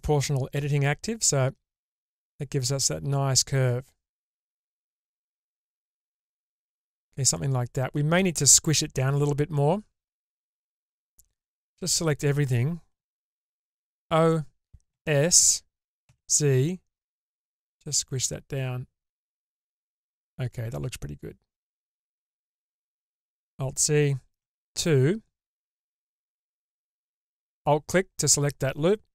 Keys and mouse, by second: 10.8-13.6 drag, 13.6 o, 14.9 s, 19.6-22.4 middle drag, 23.3 alt+z, 24.4 2, 25.7 middle click, 26.8 alt+click, 28.0-29.1 middle drag.